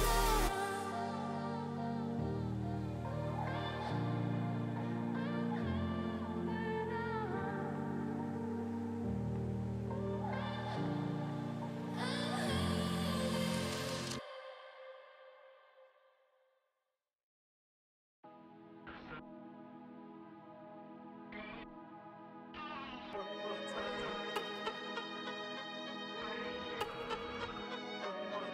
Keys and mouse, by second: 1.6 space, 1.8 space, 1.9 click, 2.3 click, 4.7 click, 5.5 click, 6.0 click, 7.1 click, 7.4 ctrl+z, 7.6 x, 8.0 click, 8.3 x, 9.1 click, 9.5 ctrl+z, 9.7 click, 11.3 click, 14.1 click, 15.1 click, 16.7 space, 17.1 click, 17.8 [, 18.1 click, 18.9 click, 19.7 click, 20.2 click, 21.2 click, 21.5 click, 22.2 click, 22.5 click, 22.8 click, 23.2 click, 23.3 click, 23.6 x, 23.7 click, 24.2 click, 24.7 click, 25.1 x, 25.2 click, 25.5 click, 25.9 click, 28.4 click.